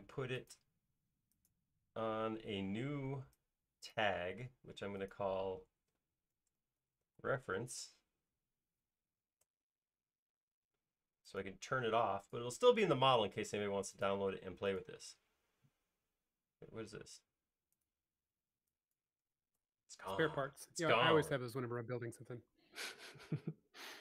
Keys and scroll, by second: 6.1-8.1 typing, 11.2 Return, 19.9 BackSpace.